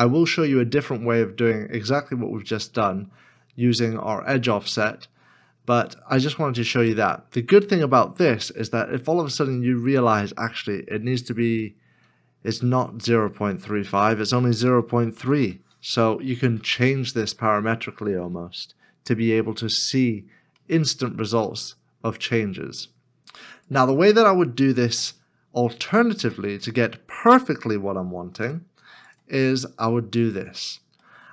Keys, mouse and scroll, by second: 15.0 KP_0, 15.2 ., 15.4 3, 16.7 Return, 20.6 middle click, 25.7 scroll down 1, 26.3 middle click, 26.7 scroll down 1, 31.0 middle click.